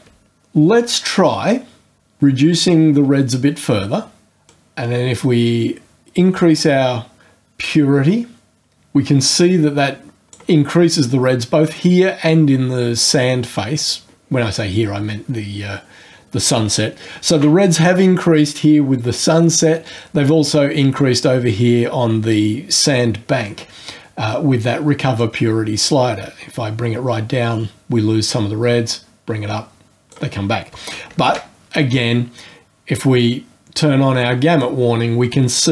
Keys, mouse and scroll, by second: 2.0-4.4 drag, 4.4-10.5 drag, 25.1-30.3 drag, 31.2 ctrl+g, 34.6-35.7 drag.